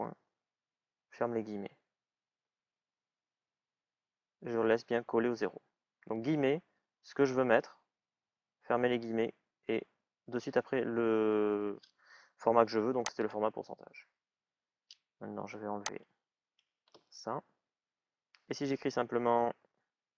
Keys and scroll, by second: 19.3 shift+é.